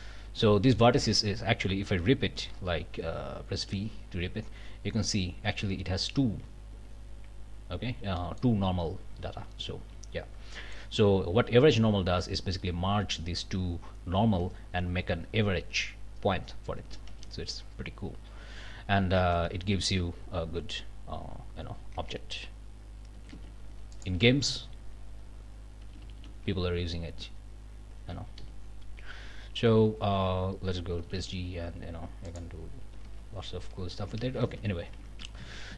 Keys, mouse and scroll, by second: 0.0 scroll up 2, 2.1 scroll down 2, 3.5 v, 6.7 Escape, 8.2 click, 9.5 ctrl+z, 10.1 ctrl+scroll down 2, 10.5 click, 11.7-12.0 scroll down 2, 13.9 scroll up 2, 17.1 alt+a, 17.5 alt+scroll up 2, 17.9 scroll down 2, 18.4 a, 19.2 Tab, 19.5 scroll down 1, 20.5-21.0 scroll up 2, 20.8 click, 22.0 Tab, 23.2 a, 23.9 alt+click, 25.9 g, 28.4 Escape, 29.9 2, 31.0 g, 32.3 click, 33.0 alt+a, 34.2 ctrl+z, 35.4 ctrl+alt+Up, 35.7 ctrl+alt+Down.